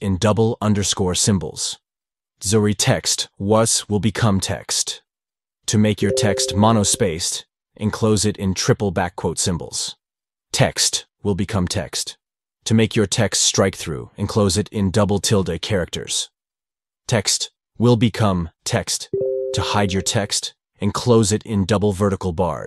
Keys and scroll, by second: 2.2 shift+-, 4.9 shift+-.